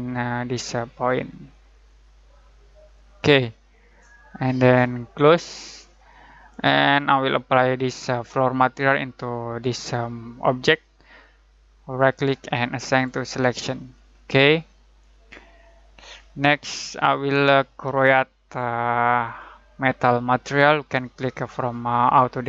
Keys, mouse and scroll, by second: 11.9 click, 12.9 click, 19.2-22.4 drag.